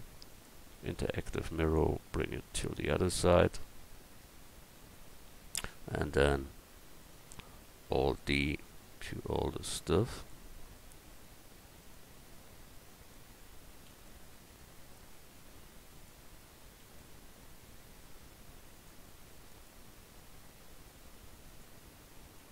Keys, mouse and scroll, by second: 2.5-5.6 middle drag, 7.8 alt+d, 8.6-10.6 drag, 11.0 alt+d, 11.8-13.7 drag, 13.7 alt+d, 14.5-16.4 drag, 16.6 alt+d, 17.4-19.3 drag, 19.3 alt+d, 20.1-22.2 drag, 22.2 alt+d.